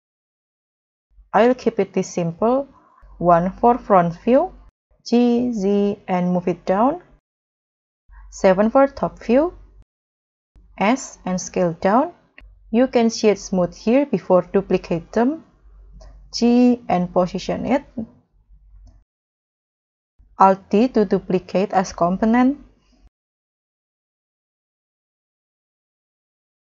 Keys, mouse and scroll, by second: 0.3 middle click, 0.8 alt+z, 1.0-1.6 alt+scroll down 4, 1.6 middle click, 1.7 middle click, 2.9 KP_1, 5.6 z, 7.9 KP_7, 8.0 KP_7, 10.7 s, 10.8 s, 16.2 g, 20.5 alt+d, 22.9 alt+d, 24.9 alt+d.